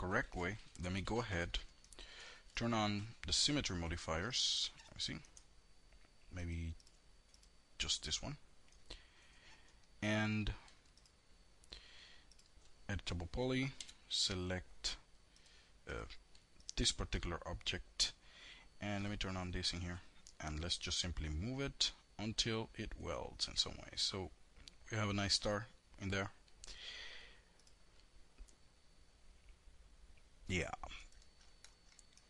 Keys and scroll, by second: 12.9 5.